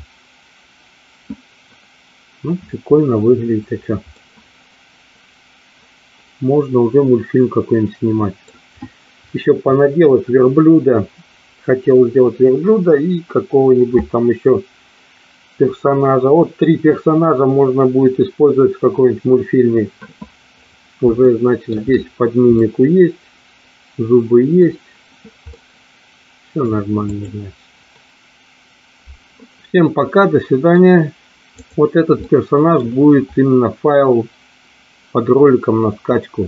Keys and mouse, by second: 4.3-8.5 middle drag, 21.4 shift+middle click, 22.7-24.7 middle drag, 25.6-26.7 middle drag, 27.1 click, 29.8 middle click, 31.5 click, 32.1 middle click.